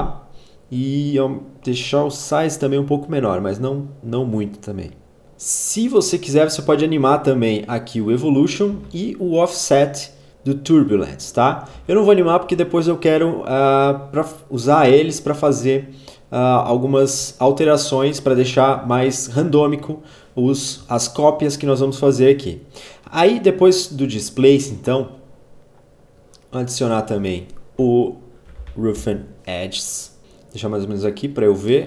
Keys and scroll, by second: 8.3 ctrl+z, 11.0 ctrl+z, 27.4-28.7 typing.